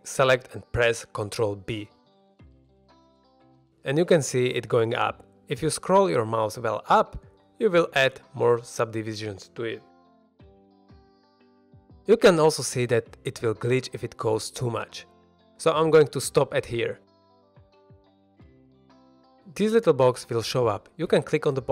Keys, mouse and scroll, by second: 0.3 shift+middle drag, 1.5 middle click, 2.3 ctrl+b, 7.4-9.4 scroll up 10, 9.4-12.3 scroll down 1, 16.9 shift+click, 17.5 middle drag, 18.0-18.3 scroll down 1, 18.3 middle click, 21.0 click, 21.0 middle click, 21.0 scroll down 1.